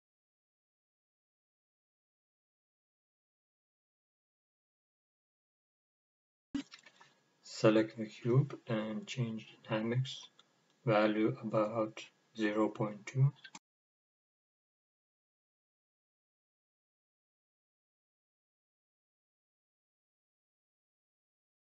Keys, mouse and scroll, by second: 1.0 drag, 2.3-5.5 middle drag, 5.5 click, 6.9 click, 8.7-9.6 scroll down 1, 9.6-10.9 scroll up 1, 10.9-13.3 scroll down 1, 13.3-14.1 drag, 14.3-15.3 scroll down 1, 15.3 drag, 15.7-16.5 scroll down 1, 16.5-21.7 drag.